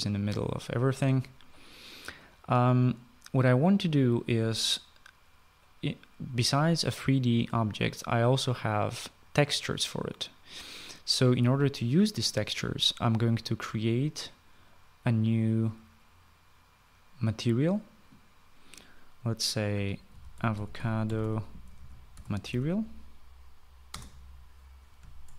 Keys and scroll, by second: 19.7-23.2 typing, 24.1 Return.